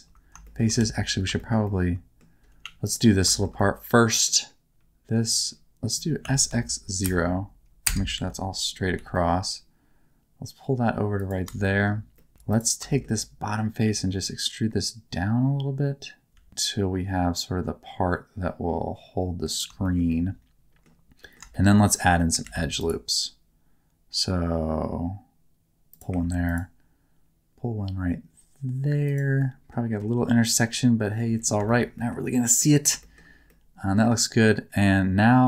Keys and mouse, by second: 0.4 shift+middle click, 0.8 alt+z, 1.4 middle click, 1.6 middle click, 2.6 3, 2.8 click, 3.3 shift+middle click, 3.6 middle click, 4.7 alt+z, 4.7 1, 6.2 s, 6.5 x, 7.0 KP_0, 7.8 KP_Enter, 8.1 alt+z, 8.9 g, 11.2 click, 11.6 middle click, 12.1 middle click, 12.3 3, 12.5 click, 12.9 shift+middle click, 13.2 middle click, 13.8 e, 16.3 z, 16.5 z, 19.5 click, 19.8 shift+middle click, 20.1 middle click, 21.2 middle click, 21.5 shift+middle click, 21.9 middle click, 22.4 ctrl+r, 25.9 click, 26.2 ctrl+r, 29.1 click, 29.4 middle click, 31.7 shift+middle click, 32.0 middle click, 32.4 middle click, 33.0 shift+middle click, 33.5 middle click.